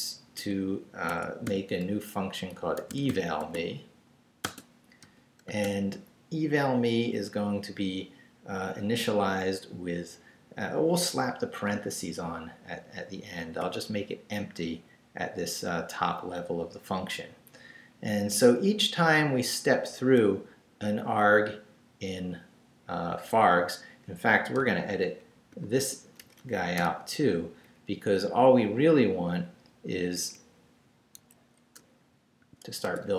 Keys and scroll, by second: 0.0-0.4 typing, 1.1 Escape, 1.5 typing, 2.5-5.5 typing, 13.4 ', 14.6 Down, 18.1 Up, 18.6 Down, 20.2 Left, 23.3 Down, 24.6-26.8 typing, 27.6 shift+Up, 29.6 Down, 30.1 Up, 31.2 Escape, 32.4 o, 32.8 Tab.